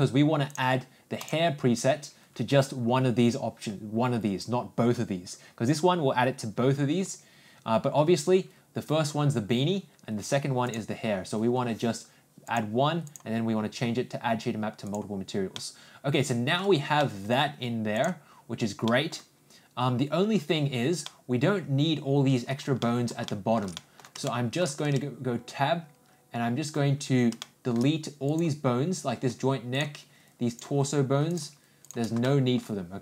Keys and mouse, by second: 1.2 click, 10.9-14.9 drag, 15.5-16.5 middle drag, 17.0-17.3 middle drag, 17.9 click, 18.8 middle click, 21.0-22.5 middle drag, 22.8 middle click, 23.2 shift+middle click, 23.7 middle drag, 24.2-24.6 shift+middle drag, 24.8 Tab, 27.4 middle click, 28.2 click, 29.7 shift+click, 31.8 shift+click, 32.2 shift+middle click.